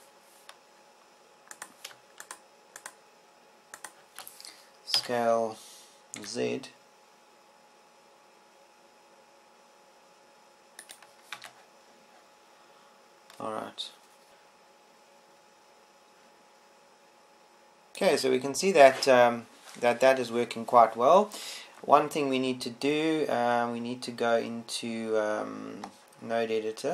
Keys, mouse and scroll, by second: 3.5 middle click, 3.5 shift+scroll, 6.5 shift+s, 12.7 click, 13.5 Tab.